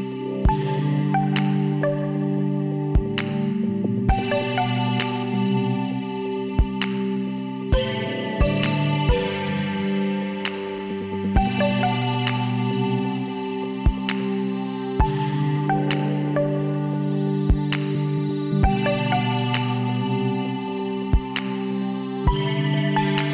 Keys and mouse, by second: 0.6-1.6 drag, 3.4 s, 5.7-7.3 middle drag, 7.3 click, 7.3 shift+d, 9.2-11.0 drag, 20.4 l, 21.6 shift+d, 22.9-23.3 drag.